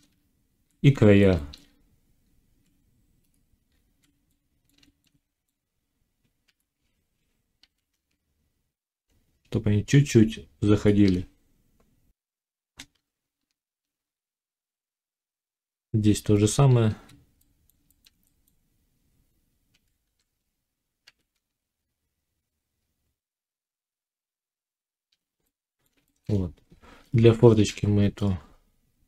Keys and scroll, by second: 0.1 z, 1.6 z, 6.4 g, 12.3 F9, 14.9 z, 19.6 g, 27.6 1.